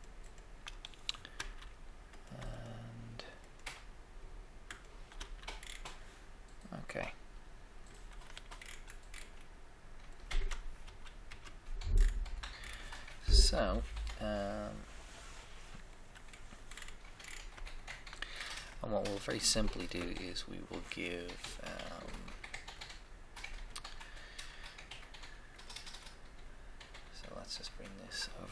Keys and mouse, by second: 1.4 f, 4.9 shift+click, 5.1 f, 5.5 f, 6.3 middle click, 6.5 middle click, 7.8 middle click, 8.3 Tab, 8.3 Tab, 10.8 1, 10.8 KP_1, 11.2 KP_3, 16.4 middle click.